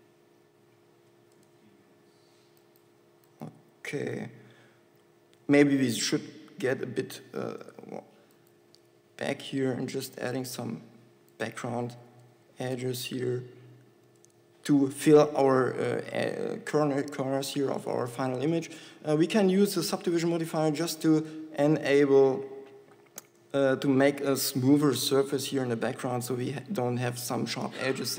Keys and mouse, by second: 3.9 Tab, 6.0 shift+f, 9.4 Tab, 10.4 Tab, 12.6 e, 17.3 Tab, 26.2 z.